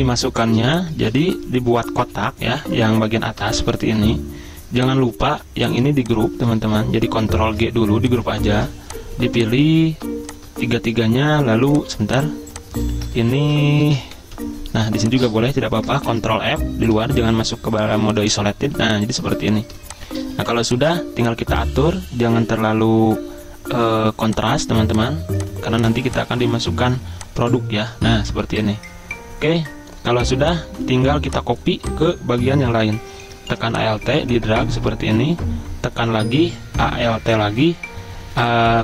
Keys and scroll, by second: 0.1 z, 1.1 v, 2.1 ctrl+f, 3.6 ctrl+shift+], 6.6 ctrl+z, 7.4 ctrl+g, 8.5 ctrl+z, 13.2 ctrl+z, 13.9 ctrl+x, 14.2 Escape, 16.1 ctrl+f, 18.8 z, 20.4 v.